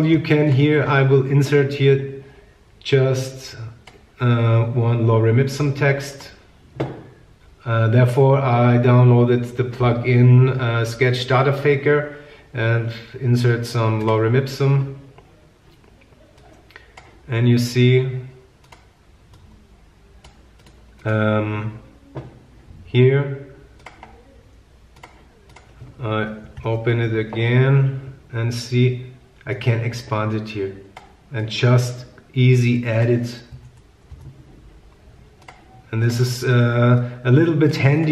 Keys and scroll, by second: 33.7 BackSpace, 34.3 Return.